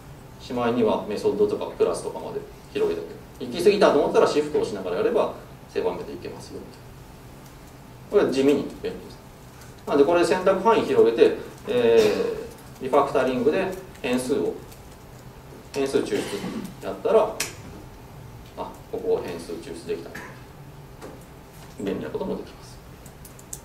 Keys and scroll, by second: 4.6 ctrl+shift+super+w, 10.0 super+w, 12.6 ctrl+alt+shift+super+t.